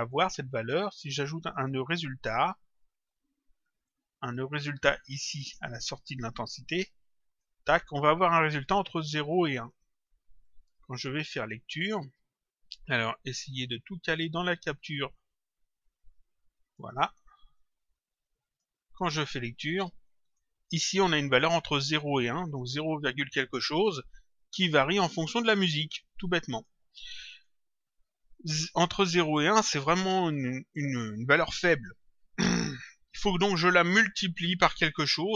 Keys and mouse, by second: 0.0 click, 1.3 click, 3.8 click, 5.8 click, 9.1 click, 10.4 click, 13.5 click, 15.9 click, 17.5 click, 20.2 click, 26.5 click, 28.9 click.